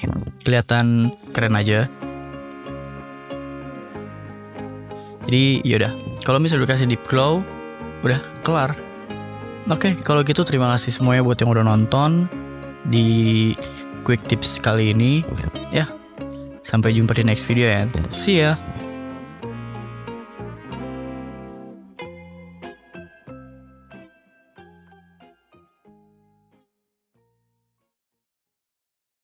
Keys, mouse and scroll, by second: 1.5-2.7 typing, 2.5 click, 4.1-5.2 drag, 5.4-6.4 drag, 6.6-7.2 drag, 6.9 ctrl+s, 16.8 click, 17.8 drag.